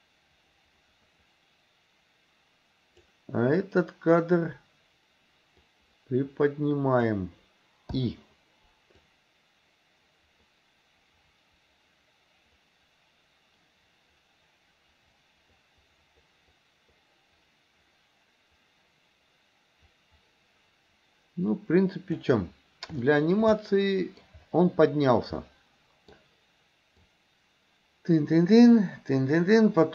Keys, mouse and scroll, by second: 5.6 click, 6.1-7.2 drag, 8.0 i, 9.1-22.3 drag, 23.1 shift+middle drag, 23.6-24.3 middle drag, 25.4-26.2 middle drag, 27.1-29.9 drag.